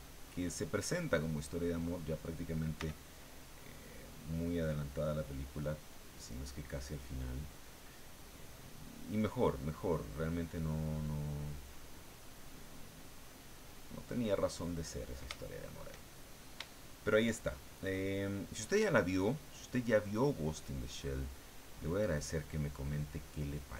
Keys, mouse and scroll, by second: 0.7-2.5 middle drag, 2.5-3.4 scroll up 1, 2.7 f, 3.4-4.0 scroll up 1, 3.5 click, 4.0 click, 4.6 click, 5.1-6.6 drag, 6.9 click, 8.4 click, 8.8 click, 9.8-11.0 drag, 11.0 click, 12.1 click, 13.0 click, 13.7 click, 14.7-15.9 drag, 16.0 shift+click, 16.8 shift+click, 17.4 shift+click, 17.4-20.2 shift+middle drag, 20.2-23.7 drag.